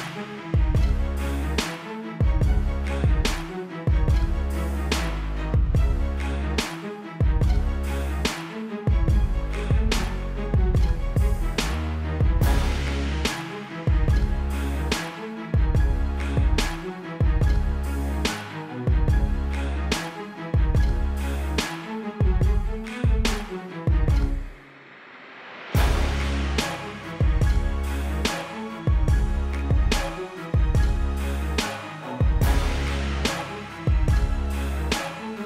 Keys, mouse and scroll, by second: 1.0 right click, 2.2 click, 3.7 -, 3.9 ctrl+t, 4.6 click, 5.8 =, 6.3 alt+click, 6.9 click, 7.4 Return, 7.7 a, 8.3 click, 8.6 ctrl+d, 8.9 ctrl+Tab, 9.4 click, 10.7 ctrl+KP_0, 11.0 -, 11.5 click, 11.8 t, 12.6 Return, 15.1 click, 17.0 click, 23.7 [, 23.8 click, 26.5 alt+BackSpace, 26.8 click, 34.7 shift+click.